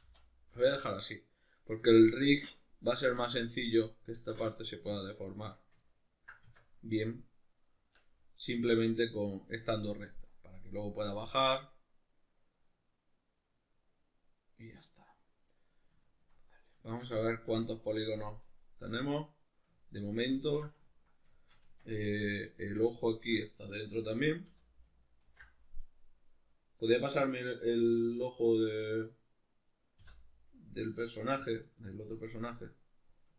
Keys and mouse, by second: 5.9 ctrl+middle click, 6.4 Tab, 6.8 middle click, 16.0 ctrl+middle click, 21.3-22.1 shift+middle drag, 21.6 Tab, 22.1 right click, 22.6 Tab, 23.3 right click, 23.9 l, 25.3 ctrl+i, 30.7 middle click, 31.6 right click, 32.0-33.3 middle drag.